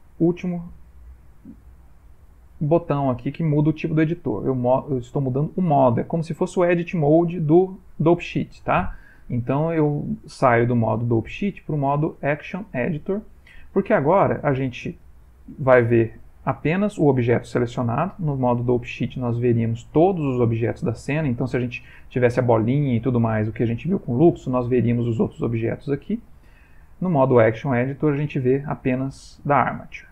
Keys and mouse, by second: 8.7 click, 14.8 click, 18.3 click, 26.1 click, 29.8 middle click, 30.0 middle click.